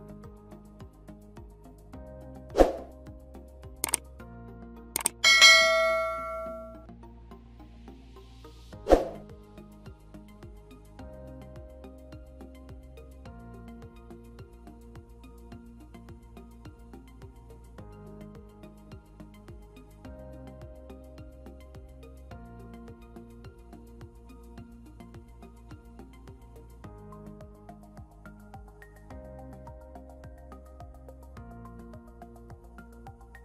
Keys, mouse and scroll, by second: 15.9 double click.